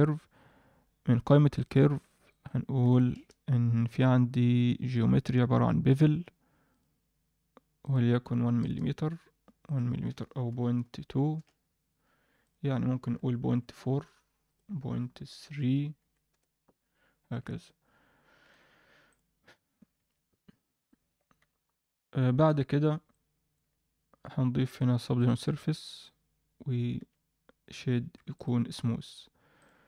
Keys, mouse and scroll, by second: 0.9-1.6 scroll down 1, 1.6 drag, 1.6 scroll down 1, 2.3 shift+click, 3.6-4.6 scroll down 2, 4.8 click, 5.1 scroll down 1, 6.6 click, 7.8 click, 9.6-11.3 drag, 12.4-13.6 drag, 14.4-16.3 drag, 17.3 alt+a, 17.6-18.4 alt+middle drag, 19.1 click, 19.9 ctrl+KP_1, 20.8 alt+middle drag, 22.4 KP_7, 23.1-23.5 alt+middle drag, 24.6 click, 25.1-26.1 drag, 26.9 ctrl+a, 28.3-29.8 right drag.